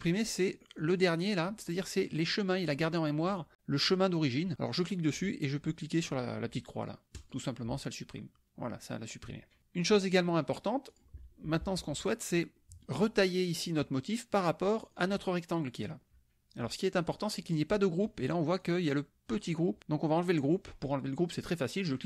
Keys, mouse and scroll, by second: 0.8 click, 4.9 click, 7.2 click, 9.6 click, 10.1 click, 10.9 click, 11.5 KP_Subtract, 12.6 middle click, 12.6 click, 13.8 click, 15.0 click, 16.9 click, 18.7 click, 19.3 click, 21.9 click.